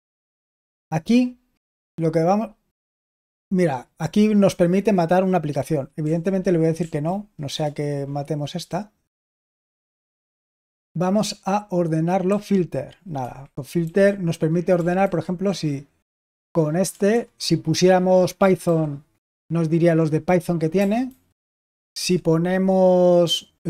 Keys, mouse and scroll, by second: 0.0 Down, 1.7 k, 6.0 l, 6.7 Right, 7.4 Return, 12.2 f, 13.1 Escape, 13.7-15.5 typing, 16.8 BackSpace, 17.0 BackSpace, 18.3-19.0 typing, 20.7-21.0 typing, 21.9 Escape.